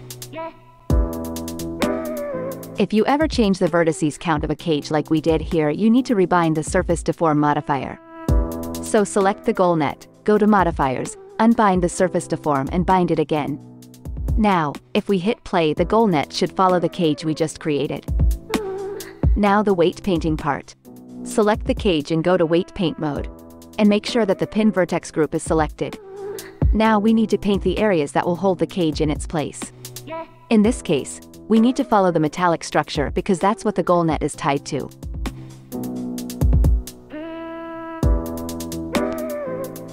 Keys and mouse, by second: 2.8 click, 7.1-19.1 drag, 11.0 space, 15.8 space, 16.4 ctrl+Tab, 17.9 shift+Left, 19.1-21.0 right drag, 21.0 middle click, 21.1 right click, 21.4 middle click, 22.3 ctrl+Tab, 23.0-26.0 right drag, 26.0 middle click, 26.1-29.0 right drag, 29.0-39.9 middle drag.